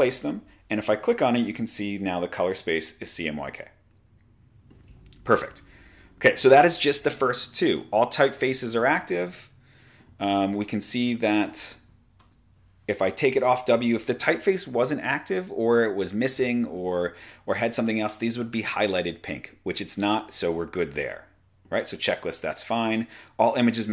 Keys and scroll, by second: 11.6-12.2 typing.